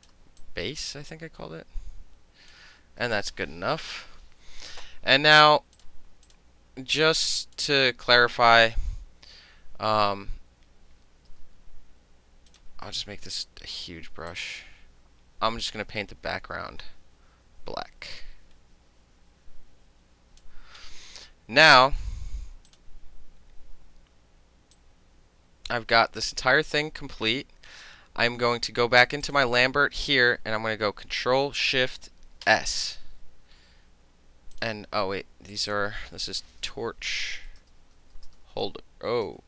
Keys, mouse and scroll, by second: 0.1 middle click, 0.3 space, 0.5 click, 0.9 middle click, 1.2-2.6 drag, 2.6 middle click, 2.9 space, 5.8 click, 6.3 click, 7.1 click, 11.4 b, 12.6 click, 13.4 click, 14.4-20.5 drag, 21.8 click, 22.8 click, 23.1-24.8 middle drag, 24.8-27.9 drag, 27.9-29.3 middle drag, 29.3 click, 29.4-31.8 middle drag, 32.5 ctrl+shift+s, 34.6 click, 35.6 click, 35.8 click, 36.9-39.4 typing.